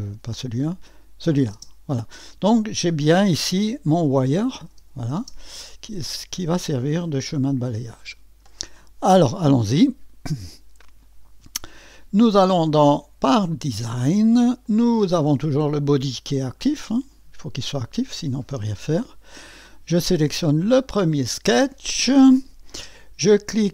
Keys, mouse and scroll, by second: 0.6 click, 1.6 space, 4.2 click, 4.7-5.2 typing, 6.6-8.6 drag, 12.2 click, 13.3 click, 14.6 click, 20.6 click.